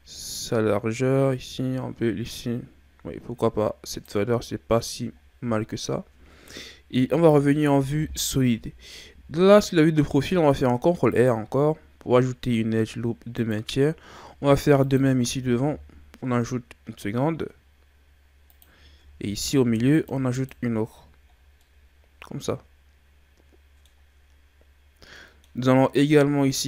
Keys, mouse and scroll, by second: 5.2-5.6 ctrl+scroll up 3, 6.9 z, 10.2 ctrl+r, 14.5 ctrl+r, 19.2 ctrl+r, 21.4 scroll down 1, 21.6-24.6 middle drag, 25.1 middle click, 25.6-26.6 scroll up 2.